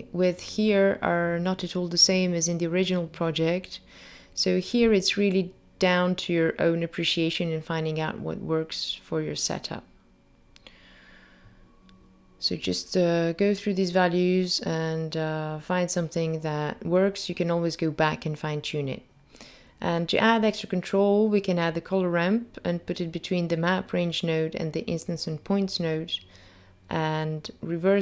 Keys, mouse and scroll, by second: 0.1 g, 0.5 click, 0.6 click, 1.5 click, 1.5 g, 2.2 click, 2.5 click, 3.2 click, 3.8 click, 4.0 g, 4.4 click, 5.0 click, 5.4 Tab, 5.6 click, 6.0 0, 6.2 click, 6.8 click, 7.3-7.7 scroll down 3, 7.5 click, 7.7 click, 13.6 click, 14.4 shift+a, 14.7 click, 21.5 click, 23.2 click, 24.3 scroll up 3, 25.6 click.